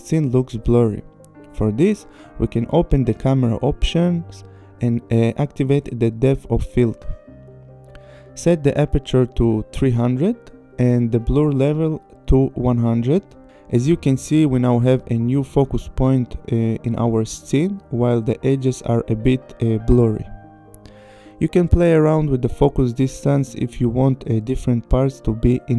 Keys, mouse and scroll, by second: 1.0 click, 1.8 click, 4.2 click, 5.5 click, 8.1 click, 8.7 KP_3, 8.9 KP_0, 9.3 Return, 10.3 click, 10.4 KP_1, 10.5 KP_0, 10.9 Return, 11.8-12.2 scroll, 12.9 scroll, 13.3 click, 13.7 click, 18.4-18.7 scroll, 18.7 click, 20.2 click, 20.2 click, 20.4 click, 20.5 scroll, 21.2 scroll, 22.0-22.5 scroll, 22.5 scroll, 23.1 click.